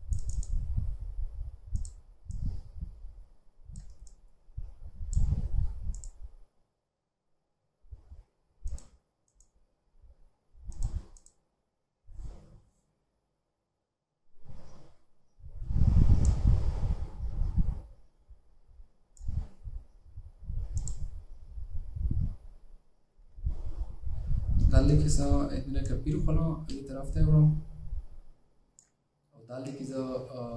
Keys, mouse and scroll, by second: 0.4 right click, 4.8 double click, 26.0 alt+click.